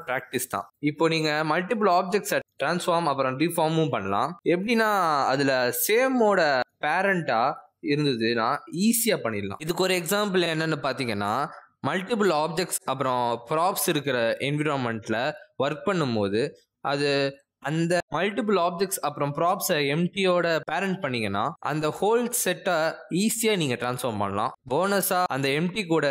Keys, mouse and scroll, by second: 1.5 g, 2.7 click, 3.2 g, 4.1 shift+click, 4.8 ctrl+p, 5.8 click, 6.2 r, 8.7 click, 8.9 r, 9.4 r, 10.2 s, 13.2 g, 13.7 r, 14.5 r, 15.5 middle click, 16.0 shift+middle click, 16.2 middle click, 16.7 s, 20.1 middle click, 20.4 r, 23.6 middle click, 23.9 g, 25.8 middle click.